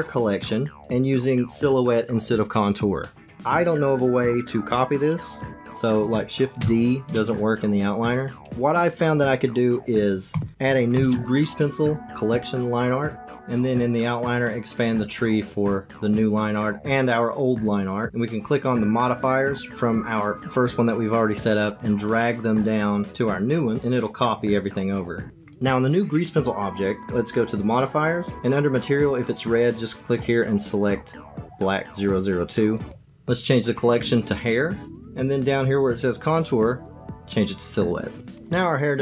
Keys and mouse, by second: 6.5 shift+d, 10.3 click, 10.5 shift+a, 10.9 shift+a, 14.8 click, 17.7 click, 21.9 click, 27.6 click, 29.9-33.0 drag, 33.9-34.9 drag, 36.6-38.3 drag.